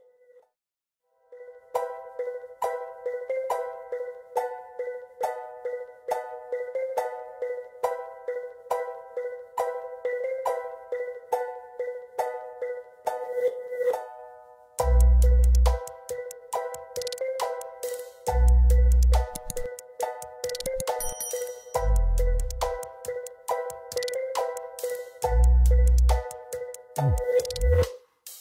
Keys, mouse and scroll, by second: 0.0 ctrl+space, 2.6 scroll up 1, 6.4 ctrl+space, 8.5 right click, 13.9 shift+click, 14.9 ctrl+space, 16.6-17.0 scroll down 1, 17.8 z, 18.7 z, 20.3 double click, 21.8 shift+right click, 24.0-24.5 scroll up 1, 24.8 scroll down 1, 26.6 double click.